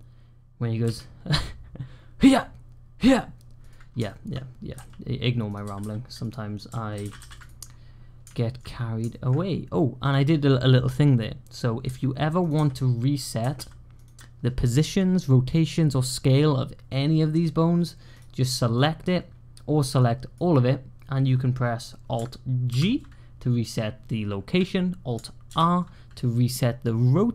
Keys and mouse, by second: 0.7 g, 3.9 shift+click, 4.6 g, 5.5 r, 6.8 alt+g, 6.9 alt+r, 7.0 alt+r, 8.2 shift+drag, 8.9 shift+drag, 11.7 g, 12.4 r, 13.3 r, 20.0 click, 22.6 alt+g, 25.3 alt+r.